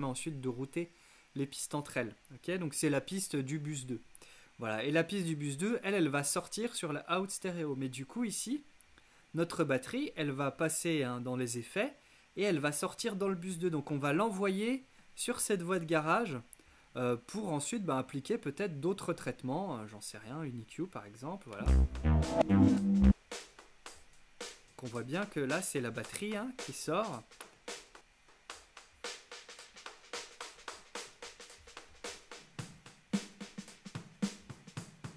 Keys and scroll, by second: 21.6 space.